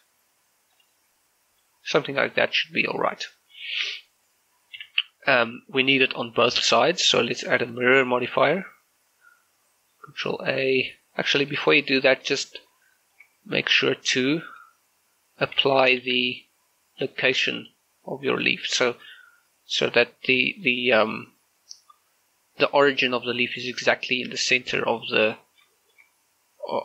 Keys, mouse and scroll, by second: 0.8 click, 1.7 middle click, 3.9 z, 7.5 click, 11.5 click, 11.6 shift+middle click, 13.3 scroll up 1, 14.1 shift+a, 16.1 ctrl+a, 17.7 click, 18.8 shift+middle click, 19.3 scroll up 1, 20.5 shift+middle click, 20.7-22.7 scroll up 1, 23.2 scroll up 1, 24.4-24.8 scroll down 1, 25.0 shift+middle click, 25.8 shift+middle click, 25.9-26.8 shift+scroll up 2.